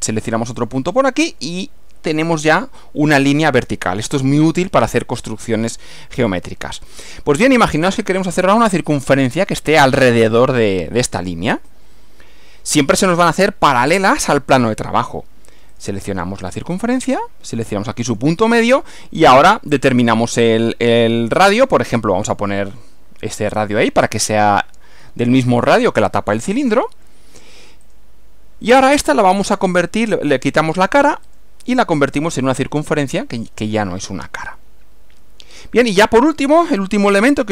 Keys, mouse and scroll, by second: 0.6 click, 15.8 click, 18.2 click, 26.4 click, 27.9 click, 30.6 click, 31.3 click, 32.5 click, 34.4-36.6 middle drag, 36.6 scroll down 1, 37.2 scroll up 1.